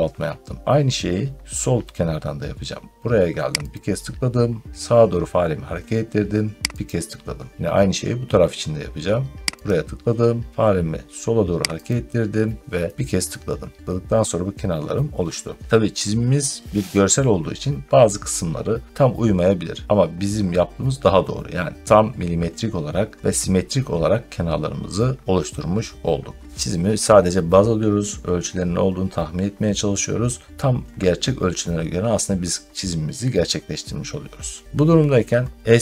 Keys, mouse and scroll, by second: 3.6 click, 6.7 click, 9.5 click, 11.7 click.